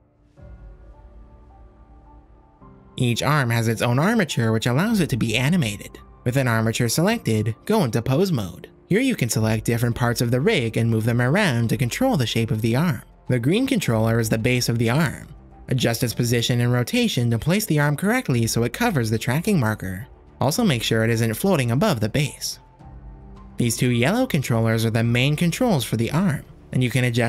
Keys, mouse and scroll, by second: 0.6 Tab, 1.7 alt+h, 2.7 click, 6.0-7.1 drag, 8.7-9.6 shift+drag, 10.8 click, 12.2 g, 15.4-15.7 drag, 15.9-16.2 shift+drag, 16.4 click, 17.1 r, 19.8 r, 20.8 g, 21.4 shift+click, 22.0-24.0 drag, 25.1 click, 26.3 g, 26.8 r.